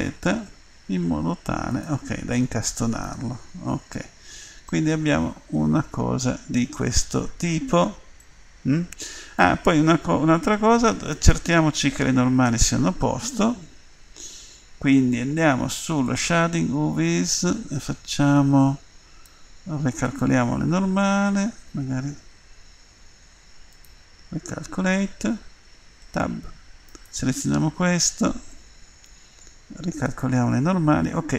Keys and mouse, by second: 2.4-3.8 middle drag, 2.4 click, 3.8 Tab, 6.5 middle click, 7.4-10.9 middle drag, 11.1-12.4 right drag, 12.4 Tab, 16.1-20.2 drag, 21.9 a, 26.1 Tab, 27.8 Tab, 31.1 click.